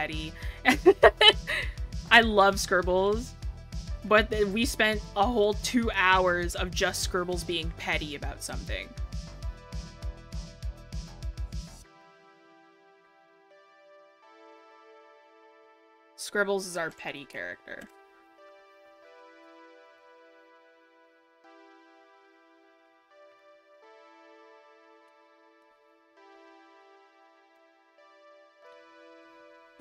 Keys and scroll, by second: 19.6 scroll.